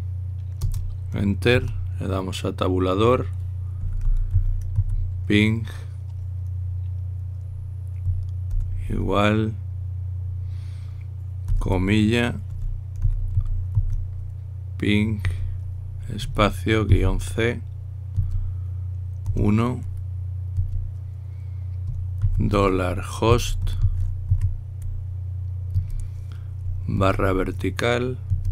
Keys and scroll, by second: 1.4-2.2 typing, 4.3-6.0 typing, 9.3 =, 13.0-15.0 typing, 17.0-17.6 typing, 20.0 typing, 22.9-25.5 typing, 27.8 typing.